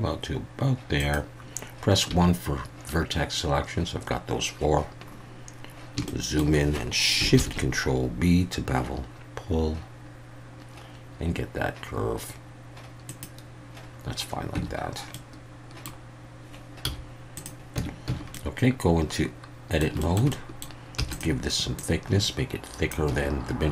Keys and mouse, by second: 1.0 click, 2.1 1, 6.0 shift+middle click, 7.4 ctrl+shift+b, 13.1 click, 14.6 Tab, 15.1-15.9 middle drag, 16.8 z, 17.2 middle click, 17.8 Tab, 18.1 a, 18.3-19.8 middle drag, 20.0 shift+middle click, 20.3 middle click, 21.0 e, 21.1 click, 21.8-22.9 drag, 23.1 a.